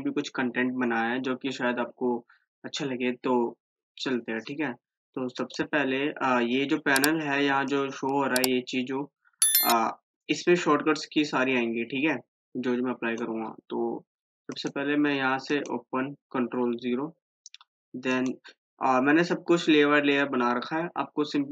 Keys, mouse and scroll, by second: 5.6 click, 7.9 click, 10.5 click, 11.5-14.8 drag, 18.3 click, 18.4 click.